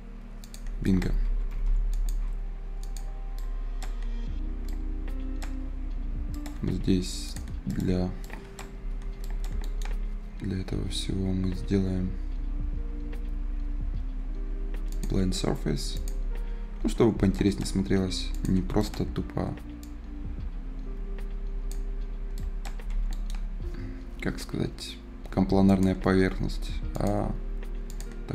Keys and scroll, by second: 1.2 Escape, 8.7 Delete, 16.8 Escape, 22.6 Escape.